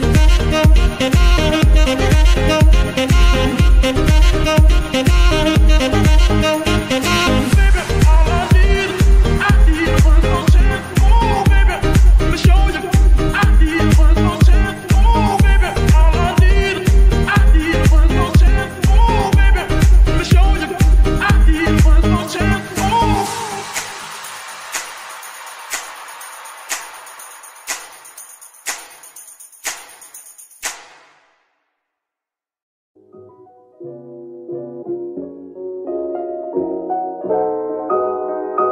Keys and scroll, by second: 3.1 g, 3.2 y, 10.7 KP_3, 10.9 z, 16.3 g, 16.4 y, 17.9 g, 18.1 z, 23.9 KP_3, 36.9 KP_3.